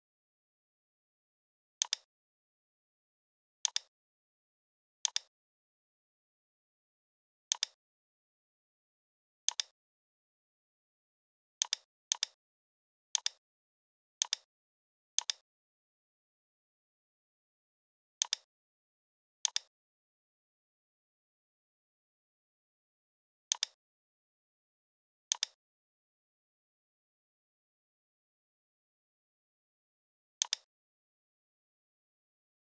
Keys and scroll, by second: 20.9 p, 28.8 i, 31.9 a.